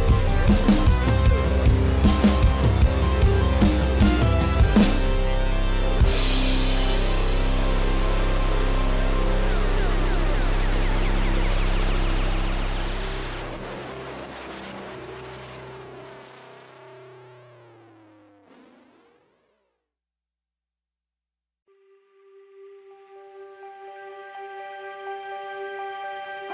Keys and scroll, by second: 11.8 [, 19.0 [, 23.1 [, 23.6 space, 24.6 ctrl+=, 24.8 ctrl+-, 26.3 ctrl+=.